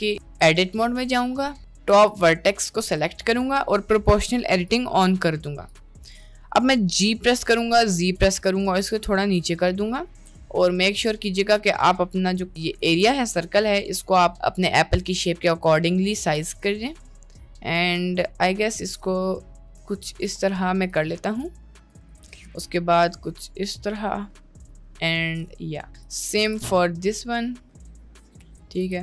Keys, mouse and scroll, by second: 0.0 middle click, 0.2 Tab, 1.3 middle click, 2.2 click, 2.8 middle click, 7.2 g, 12.8 g, 16.4 g, 21.2 middle click, 22.0 g, 22.3 g, 25.4 click, 26.0 click, 26.4 g, 28.6 middle click, 28.9 g.